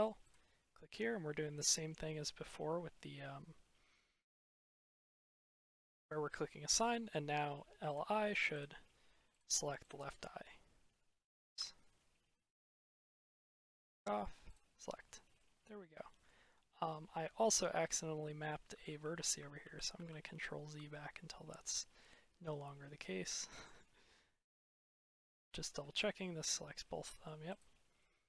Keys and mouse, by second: 5.3 click, 6.7 middle click, 8.4 click, 9.2-9.9 drag, 11.4 ctrl+z, 13.1 click, 14.4 click, 15.2 middle click, 18.8 ctrl+z, 19.2 ctrl+z, 19.5 ctrl+z, 19.9 ctrl+z, 21.6-22.0 middle drag, 24.9 click, 25.6 middle drag, 25.8-27.1 drag, 27.9 click.